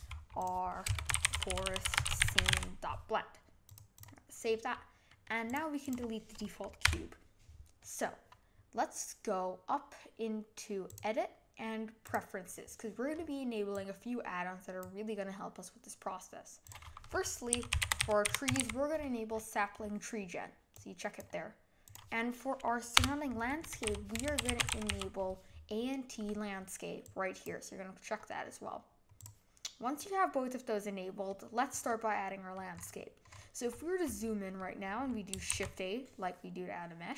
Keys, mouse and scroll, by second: 5.1-5.5 middle drag, 5.5 click, 5.8 click, 6.8 Delete, 7.8-10.8 middle drag, 10.8-13.9 drag, 30.0-32.7 middle drag, 32.7-33.5 scroll up 8, 33.7-35.5 middle drag, 35.5 shift+a.